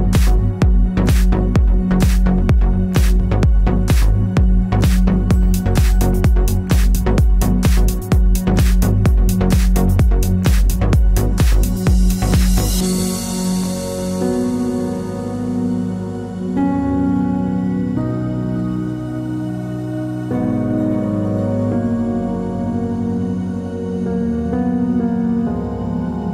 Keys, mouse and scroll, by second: 0.9 ctrl+[, 4.0 click, 5.2 shift+click, 13.4 t, 14.0 click, 14.6-16.2 typing, 17.1 click, 21.0 click, 23.3 right click, 26.2 click.